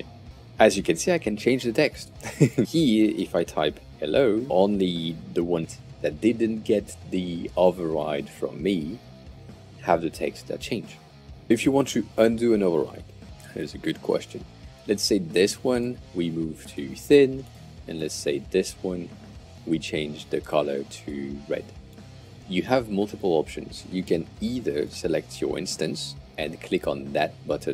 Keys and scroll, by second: 3.1 Return, 3.1-4.6 typing, 10.8 super+z.